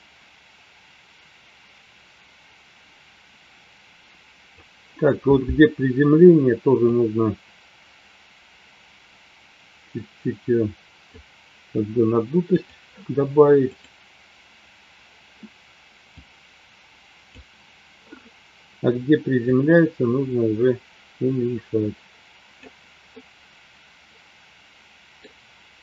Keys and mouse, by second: 6.9-11.2 drag, 14.0 click, 16.3-17.8 drag, 19.8-22.7 drag, 23.1-25.1 middle drag.